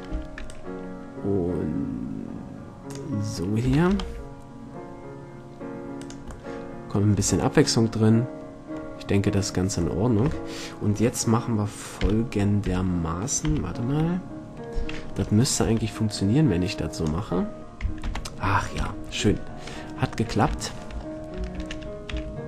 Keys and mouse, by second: 0.3 b, 3.9 shift+d, 6.2-7.8 drag, 7.4 a, 7.8 middle click, 7.8 click, 8.0 middle click, 12.2 KP_1, 12.8 KP_7, 13.6 KP_1, 14.1 KP_8, 15.8 b, 18.2 ctrl+l, 19.0 KP_7, 19.9 middle click, 20.8 middle click, 21.8 shift+d.